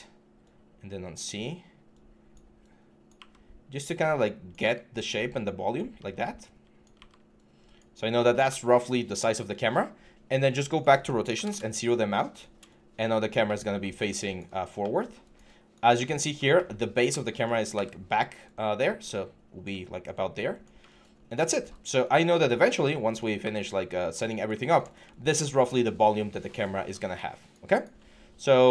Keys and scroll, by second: 3.0 e, 6.8 typing, 11.3 Return, 17.6 w, 23.2 w.